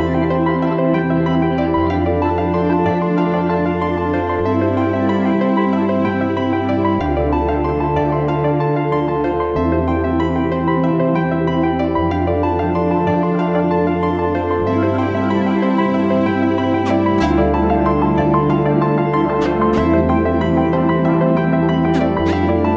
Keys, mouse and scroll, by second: 0.7 alt+click, 4.5-5.5 typing, 6.5 double click.